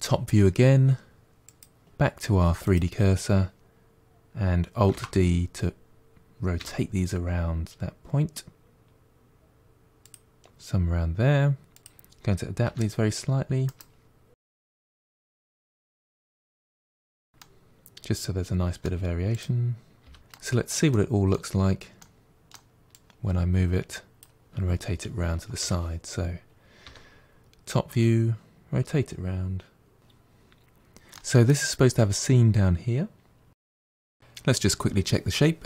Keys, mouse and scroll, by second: 1.3-4.3 drag, 4.8 alt+d, 11.6 click, 12.5 r, 14.3-14.7 drag, 14.7-17.1 typing, 15.9 click, 16.6-17.1 middle drag, 17.3-19.2 middle drag, 19.2 click, 19.9 g, 20.8-22.8 middle drag, 22.8 click, 25.5 KP_7, 26.7 r, 33.5 middle click, 34.7 Tab, 35.0 1, 35.3 g, 35.5 click, 35.6 g.